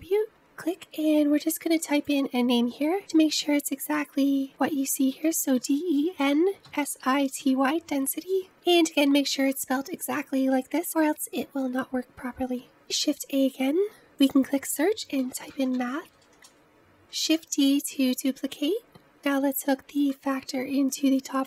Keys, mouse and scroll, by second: 2.1-4.1 drag, 10.9-12.4 drag, 13.2 shift+a, 17.4 shift+d, 20.7 click.